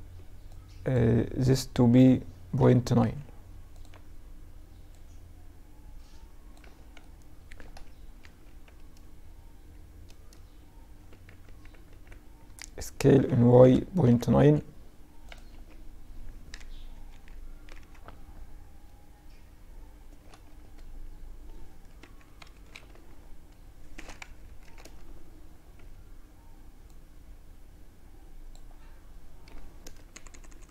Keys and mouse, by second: 0.9 s, 3.9-6.0 drag, 5.6 z, 6.0 middle click, 6.6 Tab, 7.2 Tab, 10.1 ctrl+z, 10.5 ctrl+z, 10.9 ctrl+z, 12.2 s, 14.5 Tab, 15.6 KP_Subtract, 17.9 middle drag, 18.0 middle drag, 19.3 Tab, 21.0 KP_1, 21.5 KP_3, 21.9 z, 23.3 KP_Add, 23.5 KP_Add, 23.9 a, 24.8 b, 28.5 g.